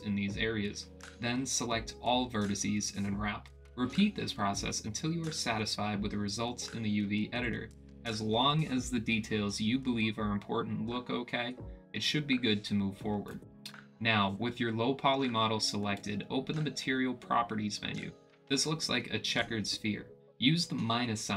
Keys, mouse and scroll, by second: 0.2 ctrl+e, 0.3 click, 0.5 click, 0.9 click, 1.1 ctrl+e, 1.4 middle click, 1.8 ctrl+e, 1.8 middle click, 2.2 ctrl+e, 2.3 middle click, 2.8 ctrl+e, 3.0 click, 3.3 click, 3.6 ctrl+z, 3.7 click, 4.1 ctrl+e, 4.2 click, 4.6 click, 5.1 click, 5.3 a, 5.6 u, 6.1 click, 6.3 middle click, 7.2 click, 7.7 click, 7.9 middle click, 8.4 click, 8.7 middle click, 9.1 middle click, 9.6 click, 9.9 middle click, 10.2 click, 10.6 middle click, 11.2 middle click, 11.7 click, 12.0 middle click, 12.2 a, 12.7 middle click, 13.3 middle click, 13.9 click, 14.1 a.